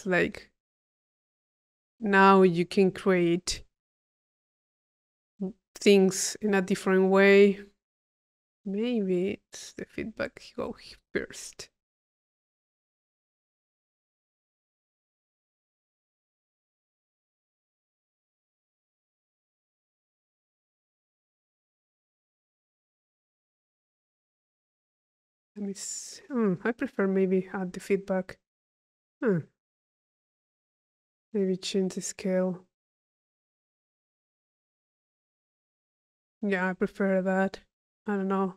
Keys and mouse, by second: 0.5 click, 1.2-2.3 drag, 2.4 click, 3.2-4.7 drag, 5.0 click, 5.7 click, 6.2 click, 9.3-11.5 drag, 11.8 click, 13.0 click, 14.0 click, 15.2 click, 15.7 click, 16.1 click, 17.5 click, 18.4 click, 19.2 click, 19.2 middle click, 20.5 click, 21.5 click, 24.2-25.7 drag, 26.3-27.7 drag, 27.7 middle click, 30.9-35.0 middle drag, 36.4 click.